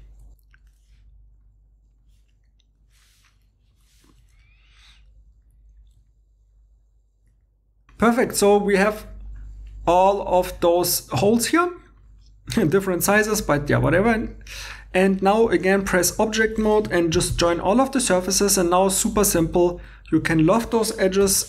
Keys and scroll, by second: 1.1-3.4 typing, 4.7 Tab, 4.8 3, 6.1 Tab, 6.4-8.1 typing, 6.7 super+z, 17.2 i, 19.4 2, 21.2 l.